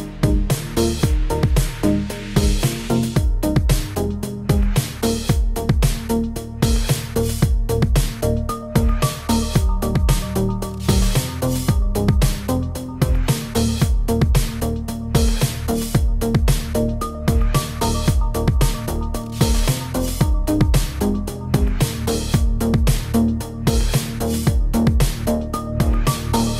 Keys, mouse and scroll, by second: 0.0-1.2 typing, 0.0 shift+middle click, 0.1 click, 0.6 click, 0.8 shift+middle click, 1.1 click, 1.6 scroll down 2, 1.6 shift+middle click, 2.1 ctrl+z, 2.1 ctrl+z, 2.2 ctrl+z, 2.5 click, 2.6 scroll up 1, 2.8 click, 3.1 shift+s, 3.2 click, 3.3 shift+s, 3.5 shift+middle click, 3.7 click, 3.8 shift+s, 4.0 click, 4.2 shift+s, 4.3 shift+middle click, 4.5 click, 5.2 click, 5.5 click, 6.0 click, 6.3 middle click, 6.5 scroll down 2, 6.6 middle click, 6.7 Tab, 6.8 click, 7.5 click, 8.1 BackSpace, 8.1 BackSpace, 9.2 click, 9.4 middle click, 9.7 click, 10.0 click, 10.6 click, 10.6 middle click, 10.8 scroll up 1, 10.8 middle click, 11.0 shift+middle click, 11.2 middle click, 11.5 scroll up 2, 11.6 middle click, 11.8 middle click, 16.1-16.4 scroll down 2, 16.2 middle click, 16.6-17.2 click, 16.9 click, 17.1 click, 17.4 click, 17.4 middle click, 17.9 click, 18.4 click, 18.5 shift+click, 18.6 shift+click, 18.9 right click, 19.2 click, 19.3 click, 19.4 shift+click, 19.4 shift+click, 20.9 click, 21.1 click, 21.6 click, 21.6 click, 21.8 shift+click, 21.9 shift+click, 22.1 middle click, 22.3 Tab, 22.7 click, 22.8 middle click, 22.8 g, 23.5 click, 23.6 middle click, 24.3 Tab, 24.5 click, 24.9 click, 25.0 Tab, 25.2 click, 25.4 click, 26.4 middle click, 26.5 scroll up 2.